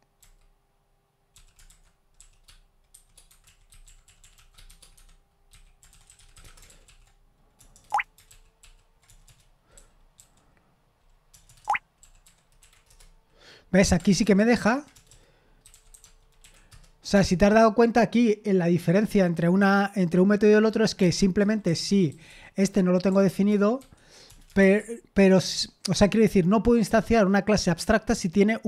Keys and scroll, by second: 6.7 ctrl+p, 6.7 typing, 9.7 ctrl+p, 9.7-10.2 typing, 16.7 Return, 16.7 typing.